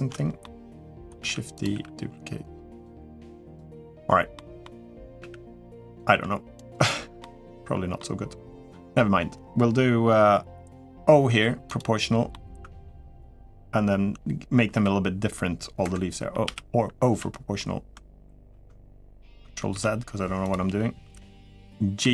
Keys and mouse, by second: 0.2 middle click, 1.0 shift+d, 1.5 r, 2.7 g, 3.5 middle click, 4.1 middle click, 5.0 r, 5.9 g, 7.0 middle click, 8.5 middle click, 11.1 o, 11.4 click, 12.1 middle click, 14.5 g, 16.2 o, 16.9 f, 18.2 ctrl+z, 19.5 ctrl+z, 21.8 g.